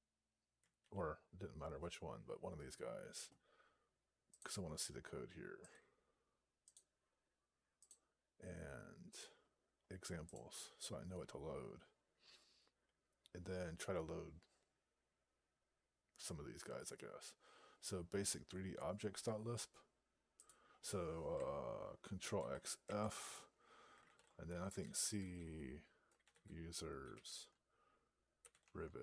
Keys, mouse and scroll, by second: 20.3 click, 22.7 ctrl+f, 23.9 ctrl+a, 24.0 ctrl+k, 24.1-27.0 typing, 27.1 Tab, 28.0-29.0 typing.